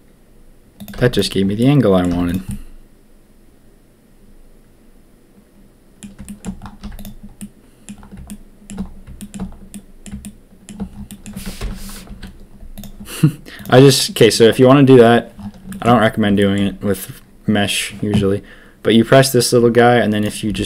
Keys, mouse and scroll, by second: 0.9 z, 1.5 click, 2.0 z, 2.4-5.0 drag, 5.0 middle click, 5.7 middle click, 5.8 middle click, 6.2 shift+middle click, 6.8 z, 7.3 middle click, 8.2 shift+middle click, 9.1 shift+middle click, 9.7 middle click, 10.2 shift+middle click, 11.0 middle click, 11.5 ctrl+KP_1, 12.0 z, 13.5 click, 15.6 shift+middle click, 16.3 shift+middle click, 20.2 click, 20.4 g.